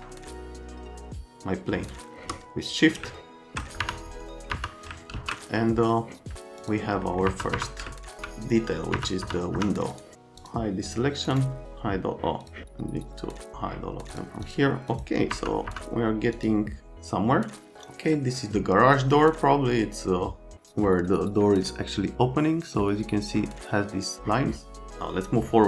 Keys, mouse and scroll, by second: 3.8 F3, 4.5 F3, 5.1 alt+x, 7.3 F3, 7.5 F3, 8.2 c, 8.9 F3, 9.2 F3, 9.6 F3, 9.9 click, 10.4 click, 10.9 click, 11.3 right click, 12.4 click, 14.1 click, 14.4 click, 14.9 click, 15.3 F3, 15.6 F3, 16.4 click.